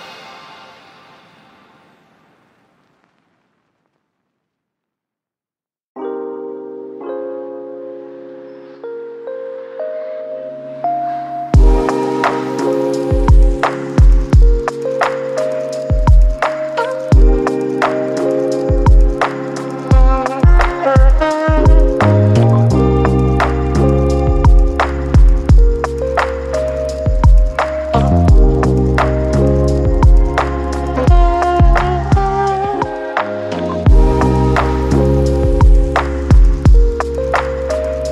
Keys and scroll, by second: 8.0 ctrl+d, 16.6 ctrl+d, 18.5 ctrl+d, 20.5 ctrl+d, 22.6 ctrl+d, 23.5 ctrl+d, 28.3 ctrl+d, 32.8 ctrl+d, 36.1 ctrl+d.